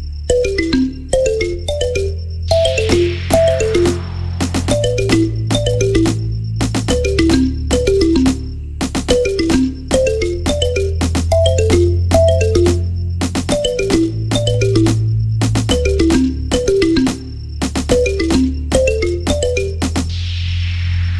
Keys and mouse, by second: 0.2 g, 1.2 g, 7.2 KP_1, 7.3 KP_3, 8.0-16.8 drag, 15.6 KP_1, 15.7 KP_3, 16.1 shift+d, 16.8-21.1 middle drag, 17.1 s, 18.5 r, 20.0 s.